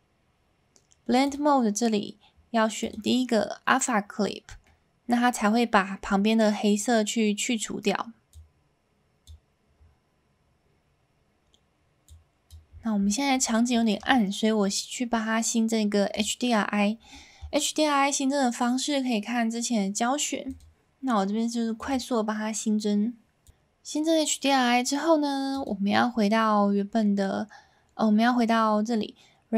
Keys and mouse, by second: 1.2-3.0 drag, 4.6-5.1 middle drag, 8.3 click, 12.0 click, 13.4 middle click, 13.8 shift+middle drag, 16.1 click.